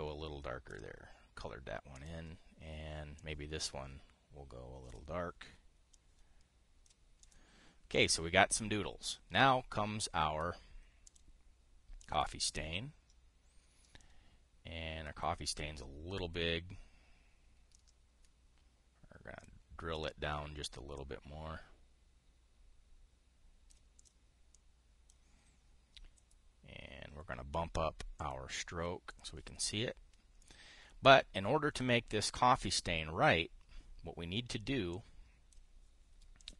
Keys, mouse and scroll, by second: 0.5-1.5 drag, 2.7 click, 3.9-5.7 drag, 6.7 click, 7.9 click, 8.7 click, 11.8 click, 12.7-14.8 drag, 21.7 ctrl+click, 24.7 drag, 25.3 click, 28.9 click, 29.8 click, 31.1-31.9 drag, 35.6 click.